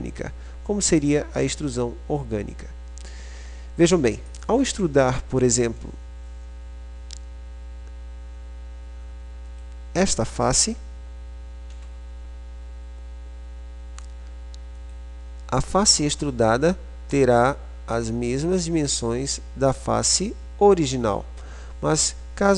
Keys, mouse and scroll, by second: 0.6-1.9 drag, 1.9 right click, 2.4-4.3 middle drag, 4.4 click, 11.8 e, 18.1-19.1 right drag, 19.3 right click, 20.3-22.5 drag.